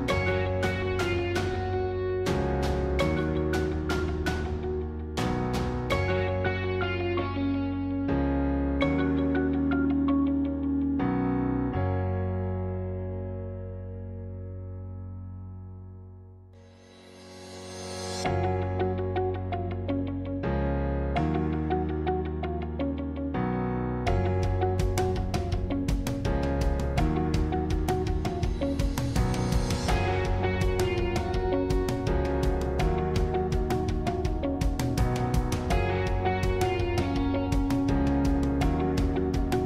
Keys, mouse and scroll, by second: 0.2-1.9 middle drag, 1.9 shift+click, 3.4 shift+click, 4.6 shift+click, 5.7 shift+click, 7.2 shift+click, 8.4 shift+click, 9.7 shift+click, 11.5 shift+click, 13.5 shift+click, 14.6 shift+click, 16.5 shift+click, 18.1 shift+click, 20.2 shift+click, 21.4 shift+click, 23.0 shift+click, 24.4 shift+click, 25.6-28.9 middle drag, 28.9 shift+click, 29.4-31.3 middle drag, 31.3 shift+click, 32.2 shift+click, 34.8 shift+click, 35.2-37.8 shift+middle drag, 37.8 shift+click, 38.1-39.6 middle drag.